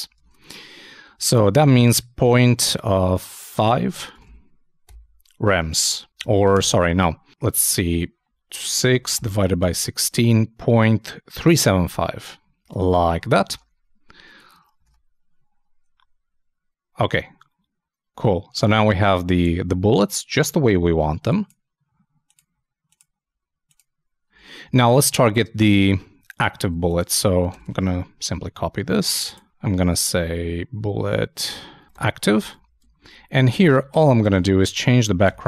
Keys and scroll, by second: 0.2 alt+super+Tab, 1.1 super+Tab, 13.5 super+Tab, 14.8 super+i, 24.3 super+Tab, 26.6 super+c, 27.5 super+Return, 27.7 super+Return, 27.8 super+v, 32.5 super+Down, 32.6 super+Left, 33.1 shift+Down, 33.6 shift+super+Right, 33.9 shift+super+BackSpace.